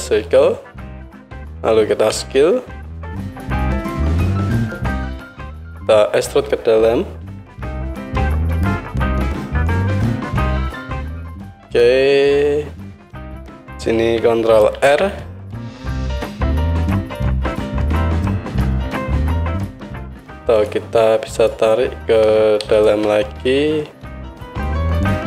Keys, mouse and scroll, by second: 0.1-3.4 right drag, 2.1 s, 7.3 e, 14.8 ctrl+r, 16.0-19.5 drag, 16.7 Tab, 19.5-20.6 middle drag, 19.6 Tab, 20.6 click, 21.5-22.7 middle drag, 22.7 shift+click, 22.8-24.3 shift+middle drag, 24.3-25.2 drag.